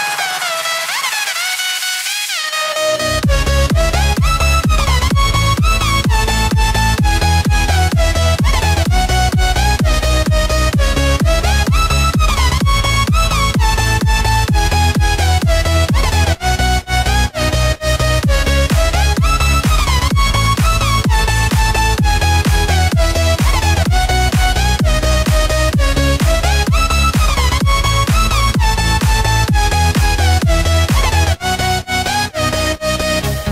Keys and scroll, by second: 6.2 ctrl+g, 7.1 ctrl+j, 7.9 ctrl+e.